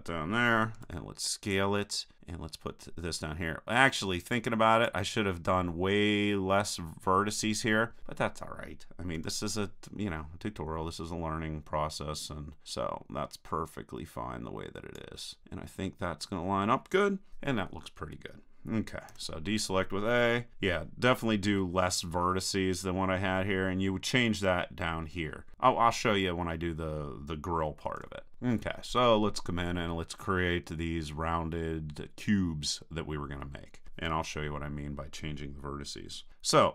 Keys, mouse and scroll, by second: 0.8 s, 4.8-6.8 drag, 9.2 KP_3, 12.6-13.9 drag, 15.4 click, 15.6-16.9 middle drag, 19.1 a, 21.7-24.1 middle drag, 25.8-28.0 middle drag, 28.0 KP_1, 33.3-36.4 middle drag.